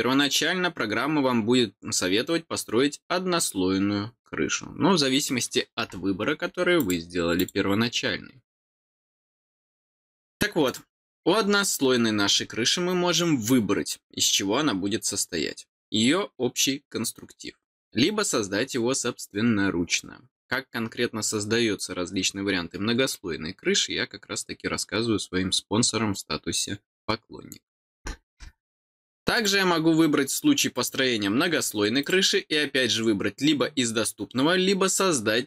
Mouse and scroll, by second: 6.7 click, 7.3 click, 9.9 click, 10.6 click, 28.8 click, 29.3 click, 30.7 click, 32.0 click.